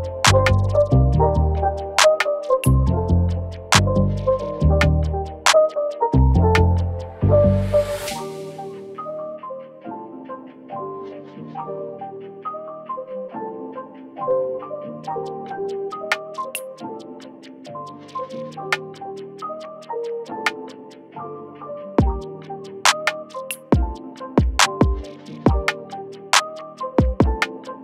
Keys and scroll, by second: 0.1 ctrl+-, 1.2 ctrl+z, 5.7-6.0 space, 6.7 space, 6.9-27.8 space, 12.0 ctrl+space, 14.5 ctrl+space, 15.9 ctrl+space, 16.4 ctrl+space, 22.3 ctrl+z.